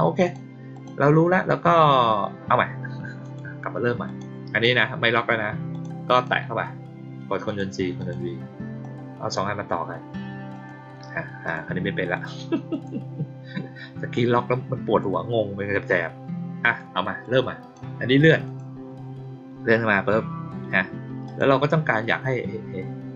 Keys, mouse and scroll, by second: 0.2 click, 0.7 click, 3.1 click, 4.0 click, 4.4 click, 5.6 click, 6.1 click, 7.4 click, 7.9 click, 8.7-9.3 drag, 10.4 click, 11.4 click, 12.1 click, 12.6 click, 14.1 click, 16.6 click, 17.1-17.7 drag, 18.4 click, 21.2 click.